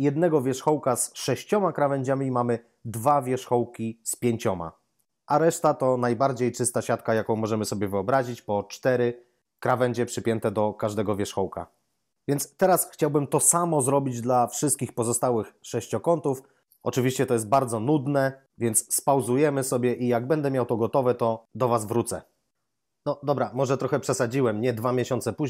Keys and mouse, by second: 9.4 right click, 10.9 double right click.